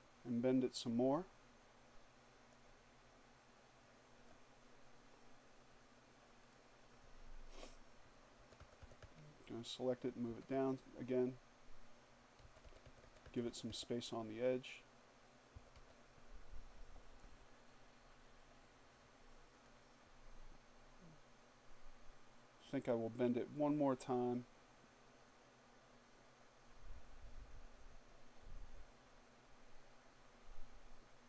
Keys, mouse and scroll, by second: 5.5 click, 7.4 Down, 9.3 Down, 11.4 Down, 14.4 Down, 18.6 click, 22.9-31.2 drag.